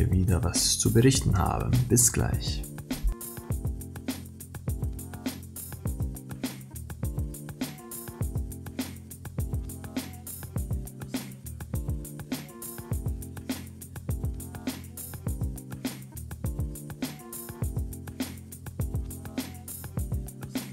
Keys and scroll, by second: 7.4 ctrl+=, 7.9 ctrl+-, 20.1 ctrl+-.